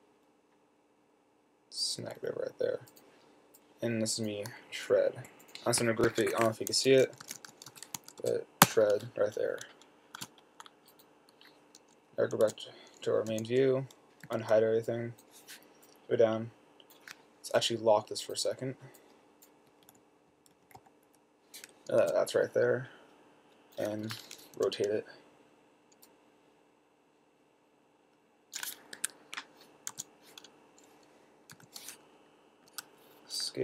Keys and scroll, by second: 2.3 Down, 2.5 Down, 6.3 fn+F2, 7.3-9.0 typing, 10.5 s, 12.7 4, 13.6 6, 14.5 h, 16.0 typing, 19.9 Left, 20.1 Left, 20.3 Left, 20.5 Left, 20.6 Left, 20.7 Left, 20.9 Left, 20.9 Left, 21.1 Left, 21.3 Down, 22.3 t, 24.9 r, 29.3 Escape, 30.2 4, 31.8 6.